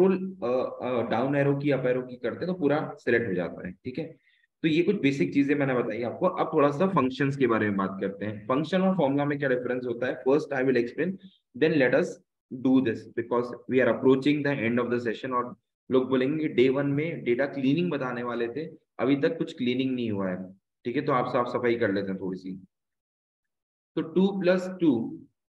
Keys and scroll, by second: 0.6 ctrl+shift+Down, 1.6 ctrl+shift+Up, 2.0 ctrl+shift+Up, 2.7 ctrl+shift+Up, 3.4 Up, 3.8 Down, 4.4 shift+Down, 4.8 shift+Down, 4.9 shift+Down, 5.8 Delete, 9.1 Right, 9.6 Left.